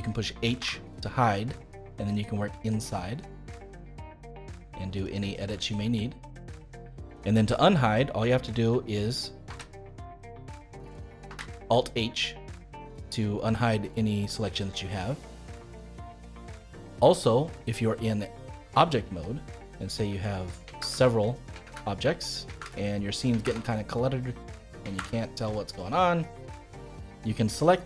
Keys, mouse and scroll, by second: 0.5 h, 1.0-2.0 middle drag, 2.0-2.6 scroll up 5, 2.6-5.0 middle drag, 5.0 click, 5.5 middle click, 6.4-6.9 scroll down 3, 6.9-9.4 middle drag, 9.4 ctrl+h, 11.2 alt+h, 11.9-14.9 middle drag, 14.9-15.2 scroll down 2, 15.2-18.3 middle drag, 18.6 Tab, 19.1-20.7 middle drag, 20.7 shift+d, 21.6 shift+d, 22.6 shift+d, 23.4 shift+d, 25.0 shift+d, 26.2-27.6 middle drag, 27.6 click.